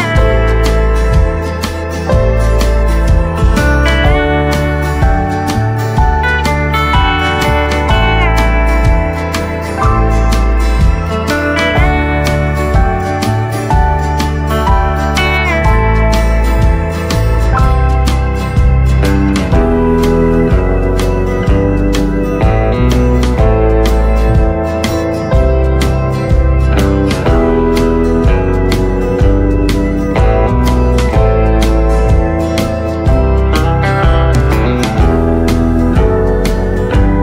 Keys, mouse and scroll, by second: 2.1 shift+click, 3.0 right click, 3.1 right click, 3.7-12.6 drag, 6.7 typing, 23.2 click, 23.8 scroll up 1, 25.0 ctrl+z, 25.3-27.9 drag, 36.0 click, 36.1 click.